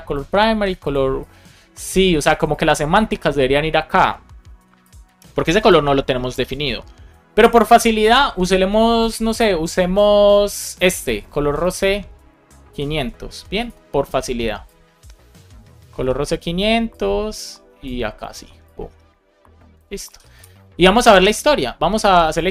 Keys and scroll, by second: 12.9 super+c, 15.9 super+v, 20.0 super+v, 20.3 super+s.